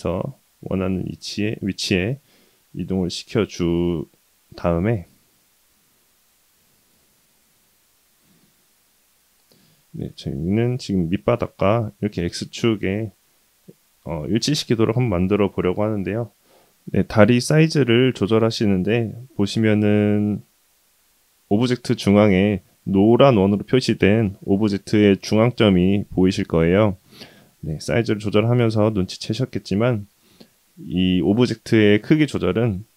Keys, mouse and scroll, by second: 2.7-3.2 shift+middle drag, 3.7-4.9 scroll down 1, 4.9 scroll down 1, 4.9 s, 7.8 g, 9.1 s, 16.7-17.2 middle drag, 17.8-18.5 scroll up 2, 18.5-19.3 middle drag, 19.5-20.1 scroll up 2, 20.2-20.6 shift+middle drag, 25.8-26.7 middle drag, 26.9-27.4 scroll down 1, 27.4-27.8 middle drag, 29.0-29.4 middle drag, 30.0 s.